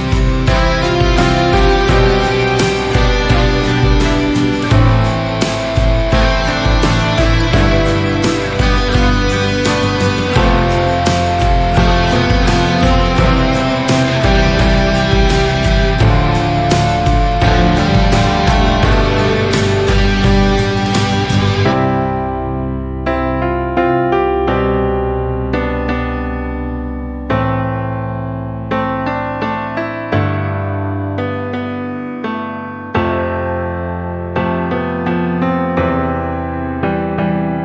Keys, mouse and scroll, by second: 0.1 2, 0.3 click, 0.8 click, 1.4 middle click, 1.9 click, 2.3 click, 2.7 click, 3.7 Tab, 4.1-4.9 right drag, 4.9 click, 5.1-5.6 middle drag, 5.6 scroll down 1, 5.7-7.8 middle drag, 8.5 KP_3, 9.2 scroll down 1, 9.4 shift+middle click, 9.7-10.2 scroll up 2, 10.2 shift+middle click, 10.6 click, 11.3 g, 13.2 scroll up 1, 13.5-15.4 shift+middle drag, 15.4 s, 17.5 scroll down 4, 18.1 shift+middle click, 18.5-18.9 scroll up 5, 19.4 click, 20.8 click, 21.1-21.4 scroll up 3, 21.4 alt+z, 21.8 scroll down 1, 22.1 shift+middle drag, 22.4 click, 23.5 r, 25.4 click, 25.9 scroll down 2, 26.2 alt+z, 26.5 scroll down 2, 26.8-27.5 shift+middle drag, 27.5 click, 29.4-31.3 shift+middle drag, 31.7 s, 35.0 click, 35.2 scroll down 2, 35.3-37.2 middle drag, 37.2 KP_3.